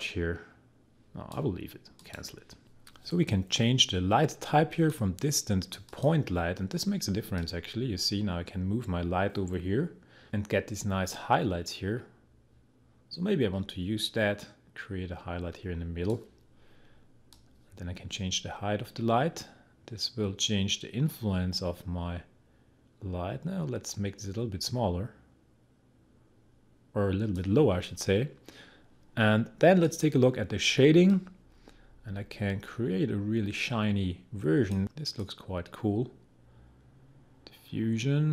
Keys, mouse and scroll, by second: 4.7-16.2 drag, 17.3-27.6 drag, 29.8-38.3 drag.